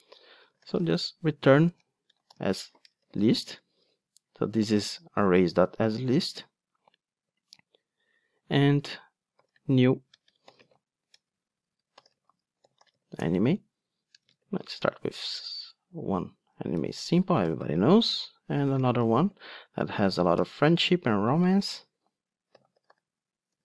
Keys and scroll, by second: 4.7 alt+Return, 13.2 Return, 20.5 Return.